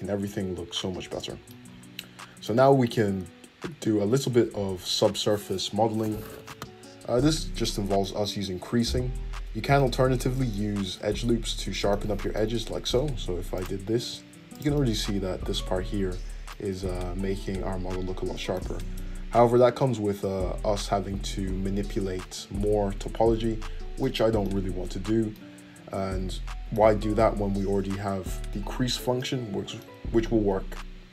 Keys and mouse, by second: 0.4 middle click, 1.4-9.5 middle drag, 2.8 `, 8.8 Tab, 9.5 Tab, 11.1 Tab, 13.0 ctrl+r, 15.1 Tab, 19.8 Tab, 20.5 ctrl+z, 21.0 ctrl+z, 21.4 ctrl+z, 22.5 ctrl+z, 23.7 Tab, 29.5-31.1 middle drag.